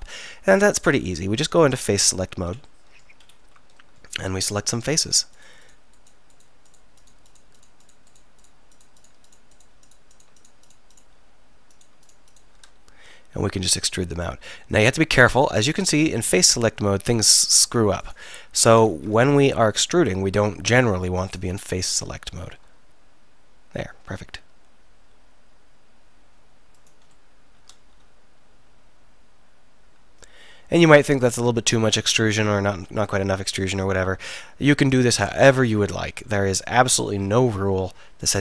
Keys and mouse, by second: 2.1-4.0 drag, 5.0-7.1 drag, 7.1 shift+right click, 8.9 shift+right click, 11.8 shift+right click, 13.6 e, 18.1 click, 18.9 ctrl+z, 20.0-21.3 drag, 22.4 middle click, 22.7 e, 26.9-28.6 middle drag, 28.7-33.0 middle drag, 37.2-38.4 drag.